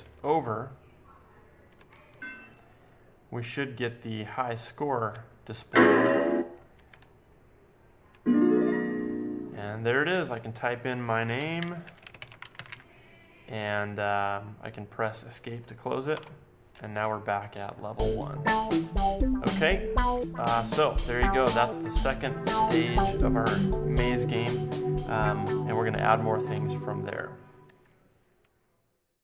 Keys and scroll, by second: 0.0 Down, 0.6 Down, 1.1 Down, 2.1 Right, 5.1 Down, 5.7 Down, 5.8 Left, 6.4 Left, 6.7 Up, 7.0 Left, 7.6 Left, 11.6-13.2 typing, 16.1 Escape.